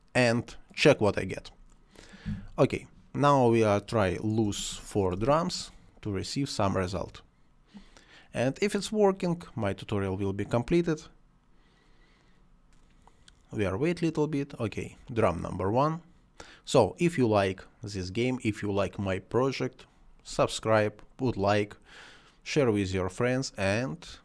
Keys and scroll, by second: 4.4 space.